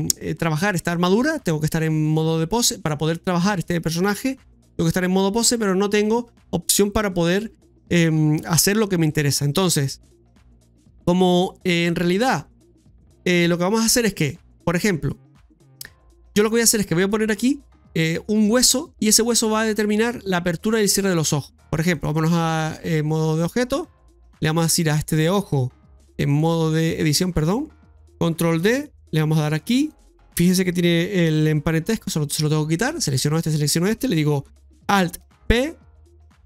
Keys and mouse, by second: 9.8 middle click, 21.8-22.8 drag, 23.8 right click, 24.6 right click, 26.2 click, 28.6 shift+d, 33.5 shift+right click, 35.2 alt+r.